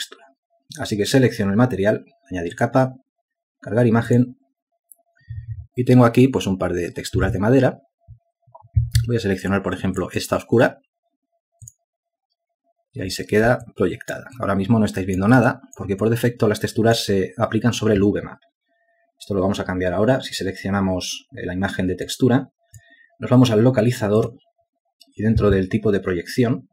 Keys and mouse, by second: 15.2 ctrl+alt+click, 17.1 alt+shift+click, 17.6 alt+click.